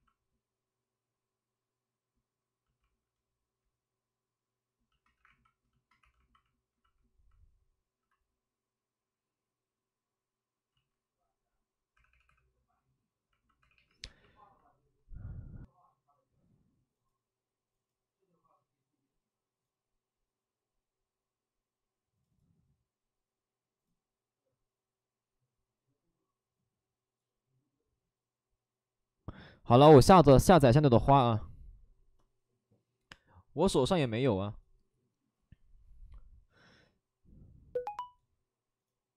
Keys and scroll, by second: 3.1 2, 5.1 2, 6.0 2, 7.9 c, 10.7 ctrl+z, 11.9 ctrl+z, 11.9 2, 12.1 2, 12.2 2, 13.5 2.